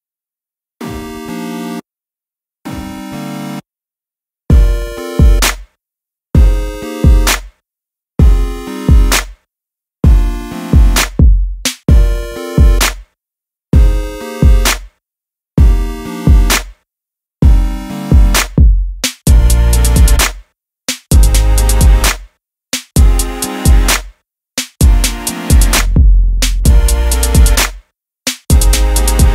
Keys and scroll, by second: 14.0-16.0 typing, 18.9 super+j, 23.2 super+a, 24.0-25.5 typing, 28.2 super+t.